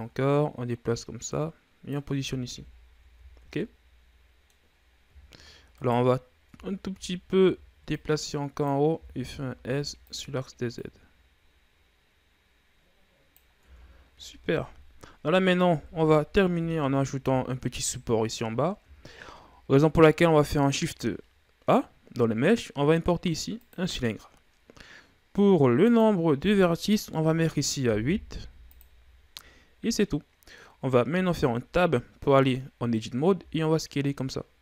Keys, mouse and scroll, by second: 1.8 click, 2.7 Tab, 3.0 a, 3.2-4.1 scroll down 8, 4.1-5.1 middle drag, 5.1 scroll up 2, 6.1 scroll up 1, 6.3 right click, 7.0 Tab, 7.4 a, 7.9 a, 8.5-9.5 drag, 9.5 s, 11.3-14.2 drag, 14.2 Tab, 14.4-16.5 scroll down 3, 16.5 KP_1, 17.1 a, 17.6-19.6 scroll down 5, 20.6 shift+a, 26.4-29.4 drag, 31.6 Tab, 33.9 s.